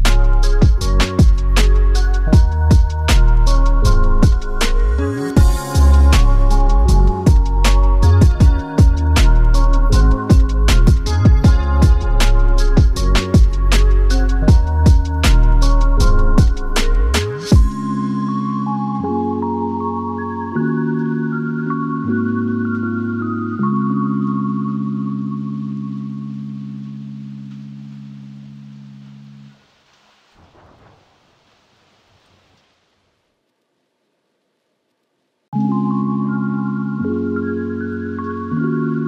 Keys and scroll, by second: 3.1 super+a, 23.7 super+y, 29.2 super+y, 37.6 Return.